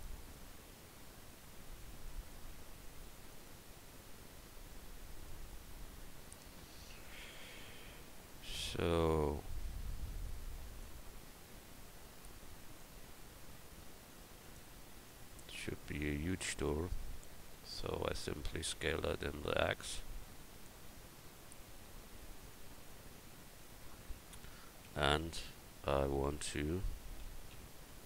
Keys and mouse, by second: 2.7 s, 11.2-13.4 drag, 13.4 s, 15.1-16.9 drag, 16.9 middle click, 18.0 s, 22.5-23.9 drag, 24.0 click, 24.9 Tab.